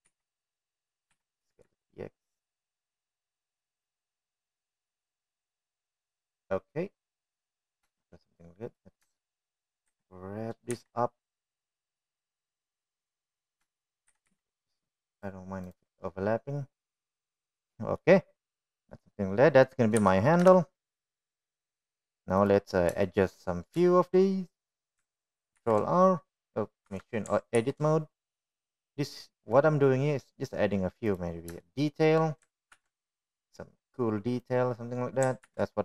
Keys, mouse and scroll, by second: 0.0 s, 1.8 g, 3.0 s, 6.4-9.0 middle drag, 10.3-10.7 drag, 11.2 shift+middle click, 11.8 g, 14.3 middle click, 15.7 shift+middle click, 16.1 g, 17.9-19.2 middle drag, 20.0 middle drag, 20.6-21.0 middle drag, 22.0 KP_1, 22.0 KP_2, 22.5 KP_1, 24.4 click, 25.1 shift+middle click, 27.6 ctrl+r, 28.9 Tab, 29.6 ctrl+r, 33.7 shift+middle click, 34.8 ctrl+b.